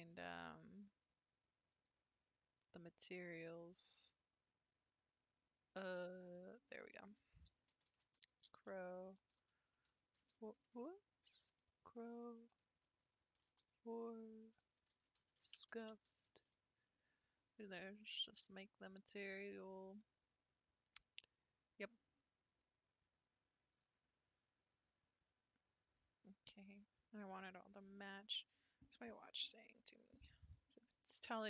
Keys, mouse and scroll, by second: 3.7 click, 6.3-9.5 drag, 10.7 BackSpace, 15.7 f, 23.7 click, 25.8 click, 27.5 click.